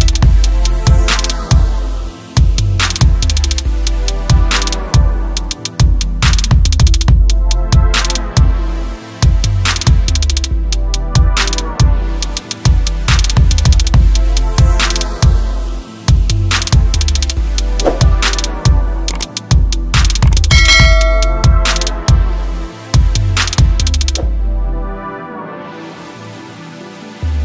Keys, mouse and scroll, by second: 0.3 space, 1.4 space, 2.1 click, 4.7 s, 4.9 click, 6.8 F2, 7.4 click, 7.7-9.9 typing, 8.7 click, 11.3 space, 11.9 click, 12.7 space, 14.4 space, 14.5 click, 15.1 space, 18.2 space, 22.2 click, 23.9 s, 24.2 click, 26.4-27.4 typing.